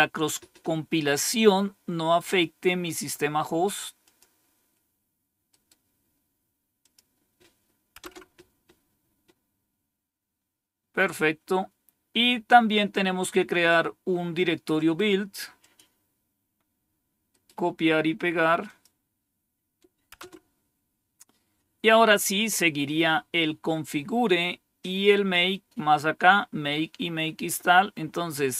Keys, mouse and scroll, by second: 2.8 right click, 3.9 click, 5.4 right click, 6.7 click, 7.9 Return, 12.3-13.6 drag, 14.6 right click, 15.4 click, 17.2 right click, 18.5 click, 20.0 Return, 21.9-22.7 scroll down 2, 23.6 scroll down 1, 24.2-25.0 scroll down 2.